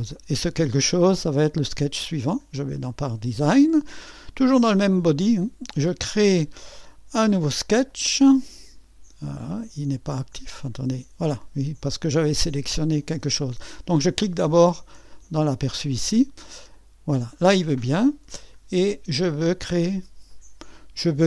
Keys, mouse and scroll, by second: 2.5-4.7 drag, 7.9-18.3 drag, 18.3-18.7 scroll down 2.